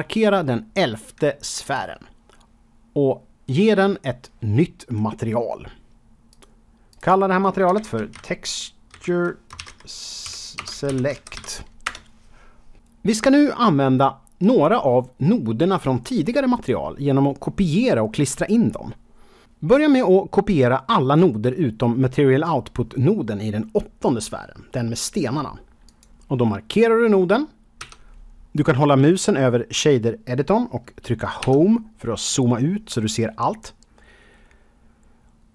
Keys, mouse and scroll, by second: 1.6 click, 6.2 click, 6.8 click, 7.6-9.1 typing, 10.2-11.3 typing, 11.8 Return, 25.8 click, 27.7 Home, 31.4 Home.